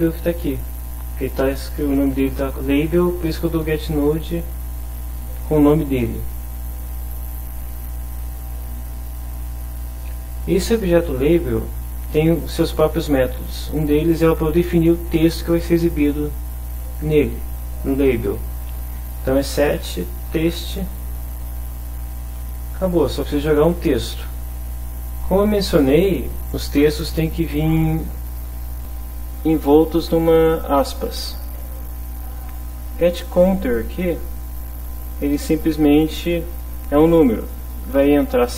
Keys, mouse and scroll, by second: 6.8 click, 7.3 click, 8.3 click, 10.1 click, 19.7 Right, 21.7 Left, 22.5 Right, 23.6 Left, 28.8-30.7 drag, 31.7 click, 32.5 click, 35.5-36.5 drag, 36.7 click.